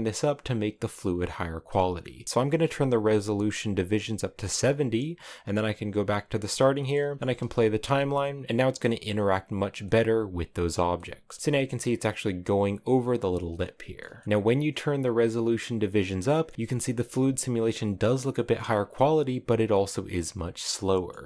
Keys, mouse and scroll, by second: 5.5-7.1 drag, 7.1 middle click, 7.1 space, 7.7-8.9 middle drag, 8.9 scroll up 3, 9.7 middle click, 10.5 scroll down 2, 10.8 middle click, 11.2-11.5 scroll up 2, 11.5-12.9 middle drag, 12.9-13.3 scroll down 5, 13.3 middle click, 14.2-15.4 drag, 16.3 middle click, 17.1 scroll up 3, 18.1 middle click, 18.7-19.6 scroll down 4, 19.6-21.2 middle drag.